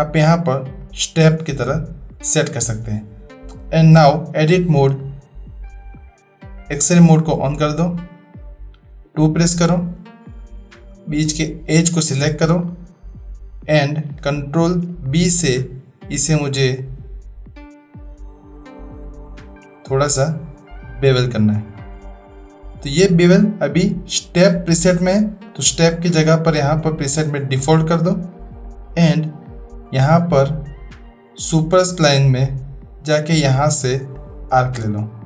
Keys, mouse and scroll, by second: 3.4 middle click, 3.9 Tab, 5.0-5.7 middle drag, 5.9 scroll up 1, 6.0 middle click, 7.6 click, 9.1 2, 10.0 scroll up 1, 10.2 middle click, 10.9-11.7 drag, 11.7 typing, 12.1 middle click, 12.2 click, 14.7 ctrl+b, 25.4-27.5 drag, 31.5 click, 33.3-34.4 drag.